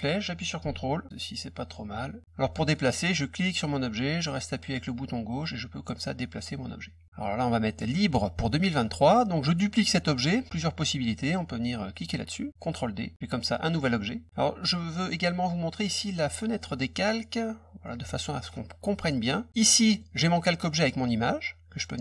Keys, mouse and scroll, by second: 2.2 click, 3.5-5.1 drag, 7.0 middle click, 7.4 scroll up 1, 8.2 middle click, 9.1 middle click, 17.9 click, 18.8 middle click, 19.5 click, 19.9 middle click, 21.7 click.